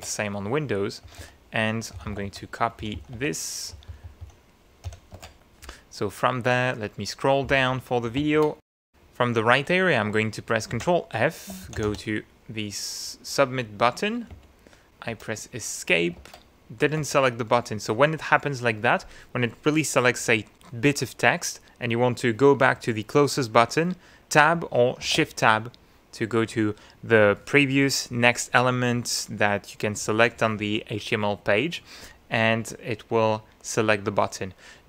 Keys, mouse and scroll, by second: 0.0 alt+Tab, 1.0-3.7 typing, 4.9 y, 5.2 alt+Tab, 5.7-6.3 scroll down 2, 6.6 scroll up 2, 7.5 click, 8.2 ctrl+f, 8.8 ctrl+shift+s, 10.7 ctrl+f, 11.4-12.3 typing, 14.3 Return, 15.1 Escape, 16.2 shift+Tab, 17.0 shift+Tab, 25.0 shift+Tab.